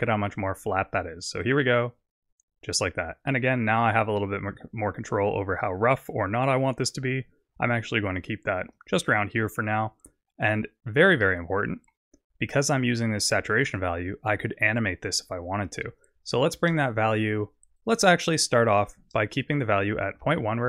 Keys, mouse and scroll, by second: 1.4 click, 3.5 click, 11.3 middle click, 13.8 click, 16.3 click, 18.8 click.